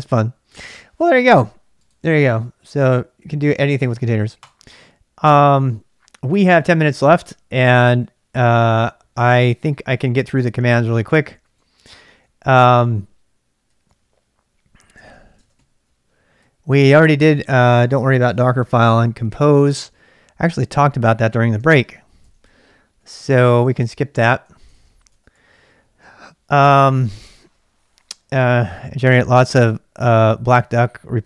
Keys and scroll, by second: 10.3 ctrl+[, 10.5-12.6 typing, 13.7 k, 13.9 k, 14.9-16.9 typing, 21.6-26.5 typing, 22.3 ctrl+[.